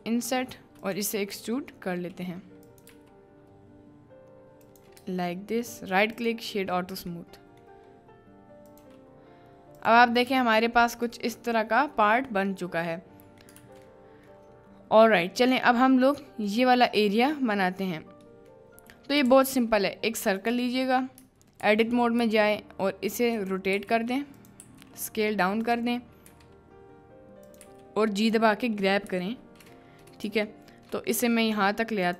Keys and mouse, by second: 5.0 b, 5.7 right click, 13.8 ctrl+z, 19.4 shift+a, 21.2 Tab, 29.1 KP_Decimal.